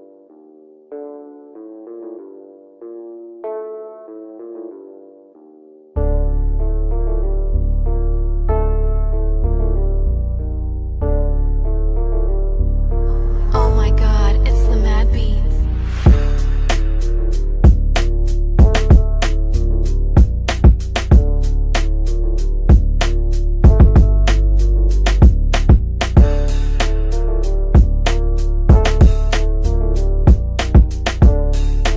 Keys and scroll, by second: 17.1 F3, 23.0 Caps_Lock, 23.3-25.0 typing.